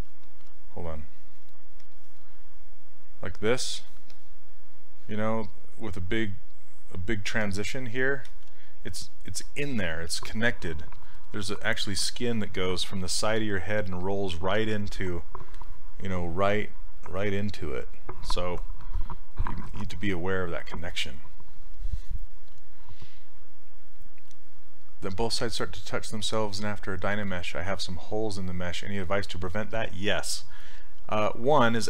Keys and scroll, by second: 8.3 ctrl+z.